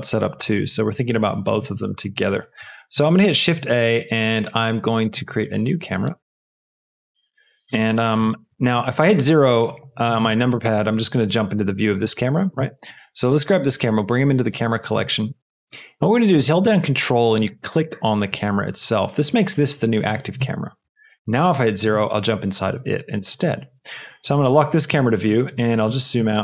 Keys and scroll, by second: 2.9 shift+a.